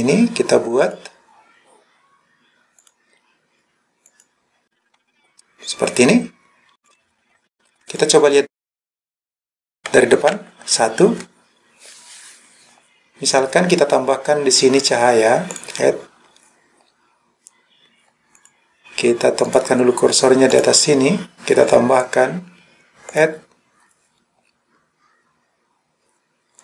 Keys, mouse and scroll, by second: 0.9 click, 6.8 click, 7.3-7.9 scroll down 4, 7.9 click, 10.3 KP_1, 15.5-18.3 drag, 18.4 click, 19.5 click, 20.6 click, 23.2-26.6 drag.